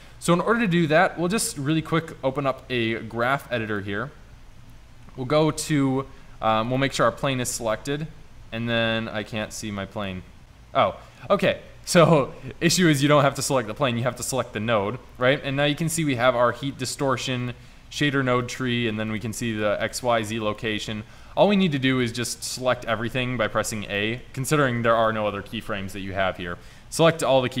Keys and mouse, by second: 7.0-7.5 drag, 10.3-11.8 drag, 16.7-17.7 drag, 22.8 a, 23.0 a.